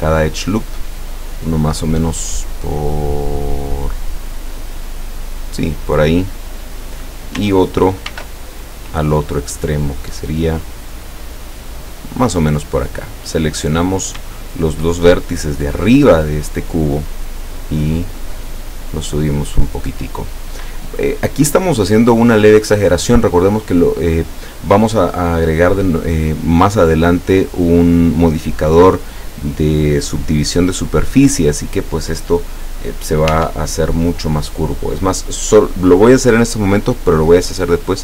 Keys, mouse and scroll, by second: 5.5 click, 8.1 ctrl+r, 9.1 click, 12.3 click, 13.3 right click, 14.2 shift+middle click, 14.7 shift+right click, 15.2-16.6 shift+middle drag, 17.3-19.8 drag, 20.2-21.6 middle drag, 21.6 scroll down 1, 21.8-22.7 middle drag, 23.1 scroll up 1, 33.4 Tab.